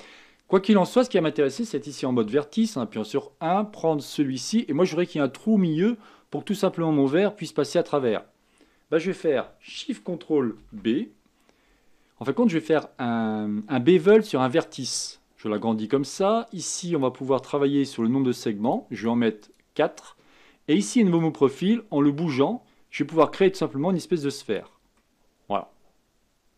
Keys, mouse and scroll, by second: 0.0 middle click, 0.8-2.2 scroll down 1, 2.2 1, 4.4 click, 10.5 ctrl+shift+b, 18.7-24.2 drag, 25.0-26.5 middle drag.